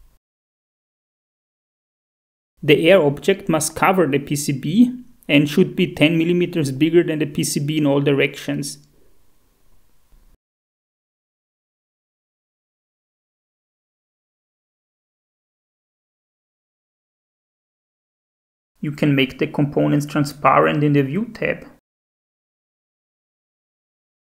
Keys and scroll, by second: 1.7 F2, 2.0-3.0 typing, 4.1-4.8 typing, 9.2 Up, 10.2 Tab, 10.9 Down, 11.8 Tab, 12.1 Up, 13.0 Tab, 13.2 Up, 14.6 Tab, 16.9 Down, 17.2 Tab, 17.4 Up.